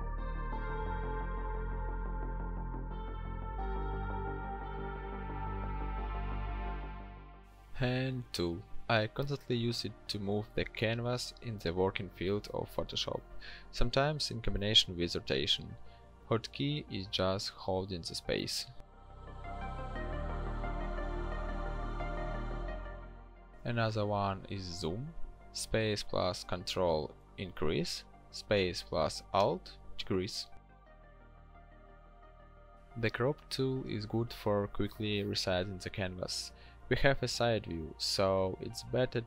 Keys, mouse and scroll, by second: 15.9 e, 23.9 ctrl+space, 25.2 alt+space, 33.1 c.